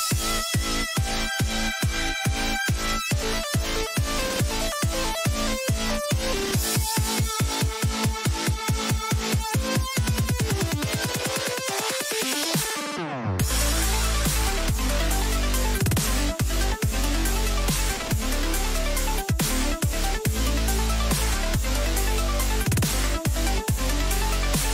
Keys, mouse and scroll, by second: 21.1-22.5 middle drag, 21.6 a.